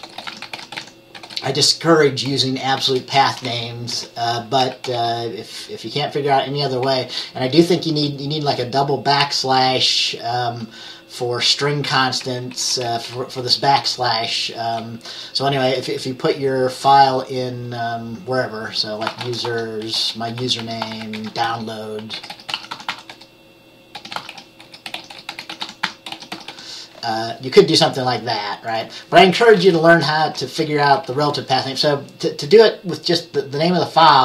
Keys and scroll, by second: 0.0-2.9 typing, 4.1 Left, 4.3-7.3 typing, 12.5 Left, 13.3 typing, 19.1-19.8 typing, 21.9-27.1 typing, 30.0 Up, 30.3 Down, 30.8-31.7 typing.